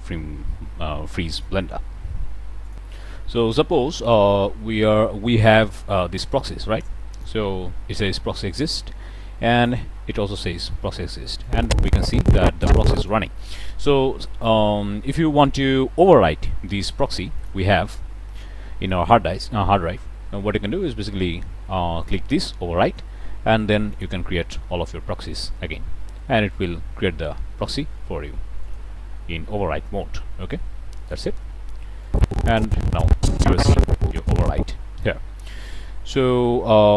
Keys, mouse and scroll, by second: 2.7 click, 3.5-3.9 middle drag, 5.7 click, 7.1 click, 8.6 click, 9.5 click, 11.4-13.2 drag, 13.3-13.7 middle drag, 17.3 click, 22.0 click, 23.9 click, 28.6 click, 30.9 click, 32.0-35.2 drag.